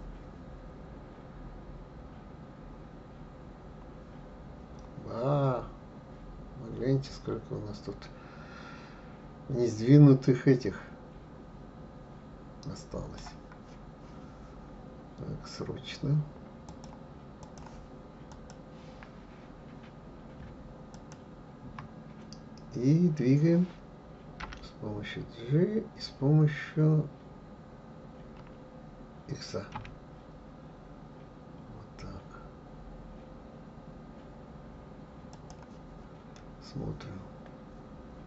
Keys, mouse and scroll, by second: 16.7-18.5 drag, 20.9 shift+click, 24.4 g, 36.3-38.2 middle drag.